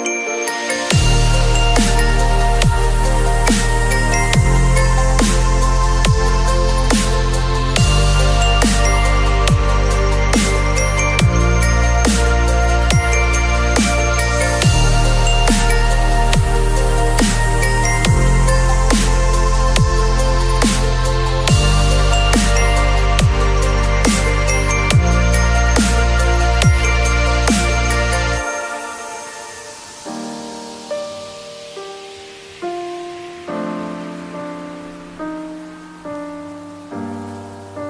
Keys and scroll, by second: 0.1 c, 0.3 ctrl+z, 2.1 x, 6.0 v, 6.8 space, 20.6 b, 21.5 ], 23.3 [, 26.4 v, 27.6 space, 29.5 ctrl+a, 29.7 ctrl+c, 30.0 ctrl+w, 30.2 ctrl+v, 31.8 ctrl+t, 37.0 alt+shift+s.